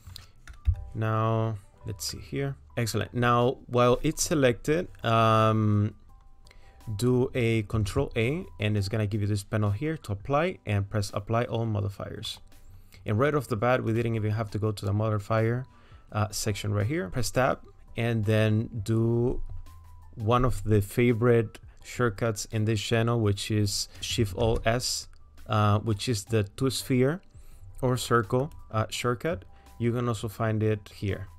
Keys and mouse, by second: 0.7 KP_1, 2.2 middle click, 3.0 click, 7.9 ctrl+a, 13.9-16.1 drag, 17.1 Tab, 24.5 alt+shift+s, 30.9-31.3 drag.